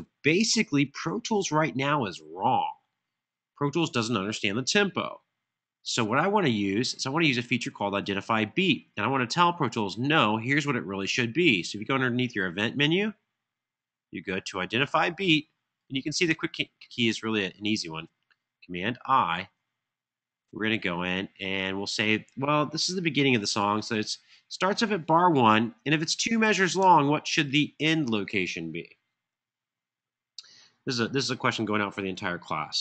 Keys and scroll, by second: 23.4 1, 25.9 Tab, 26.2 Tab, 26.6 Tab.